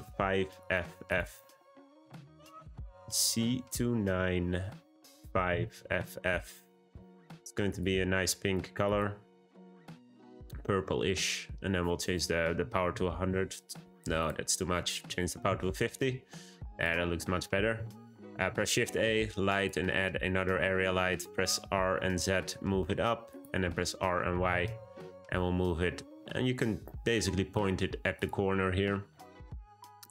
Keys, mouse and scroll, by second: 5.9 shift+f, 8.8 click, 12.8 0, 14.1-16.8 drag, 18.3 shift+a, 20.0-21.0 scroll down 1, 21.0 g, 23.9 r, 29.8-30.1 scroll up 2.